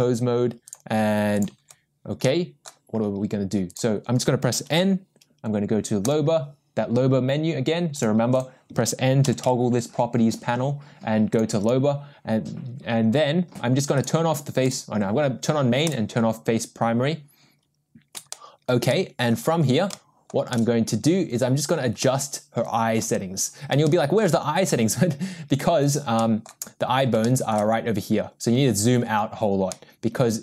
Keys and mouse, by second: 0.8 click, 2.2-2.7 middle drag, 3.7 click, 4.7 n, 9.2 n, 9.4 n, 11.3 click, 14.1 click, 14.8-15.2 drag, 15.8 click, 18.3-18.7 shift+middle drag, 18.9-19.3 middle drag, 19.9-20.3 shift+middle drag, 20.5-21.0 shift+middle drag, 22.0-23.0 middle drag, 23.8-24.2 shift+middle drag, 25.8 drag, 26.2 middle click, 27.2 shift+middle drag, 29.7-30.4 middle drag.